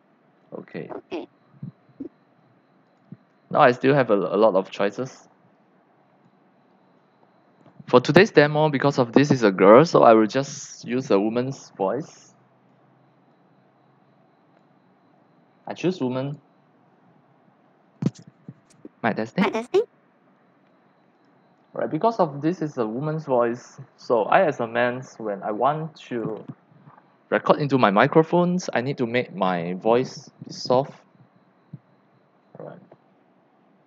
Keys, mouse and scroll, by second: 0.7-2.0 drag, 2.8 click, 5.5-6.2 drag, 6.7-8.4 drag, 12.2-12.7 drag, 13.3-14.6 drag, 16.2 click, 18.1 click, 21.1 click.